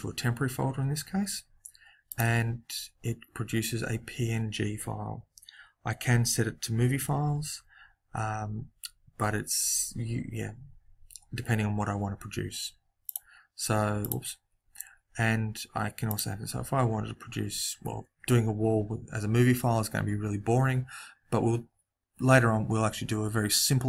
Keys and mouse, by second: 2.0 click, 13.0-15.7 drag, 16.0 click.